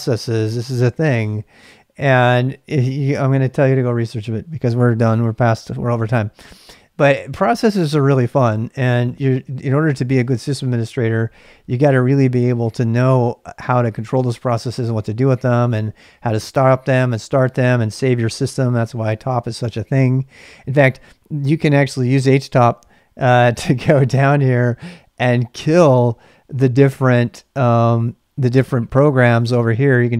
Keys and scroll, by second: 18.2-19.1 typing.